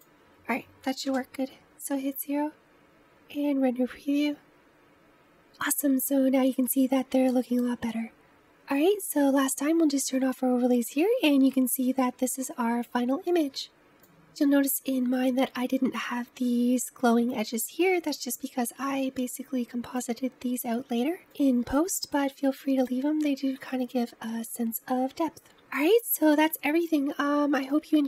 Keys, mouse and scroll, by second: 1.0 KP_0, 2.7 click, 3.0-4.6 scroll up 4, 9.1 click, 20.0 click, 21.3 click, 22.8 click.